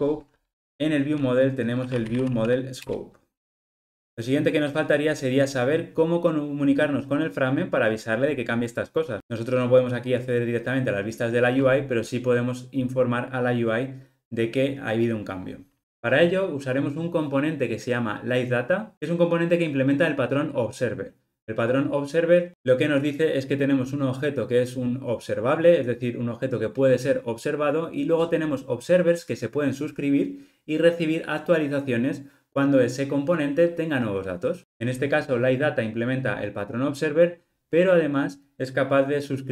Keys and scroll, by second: 2.9 Return.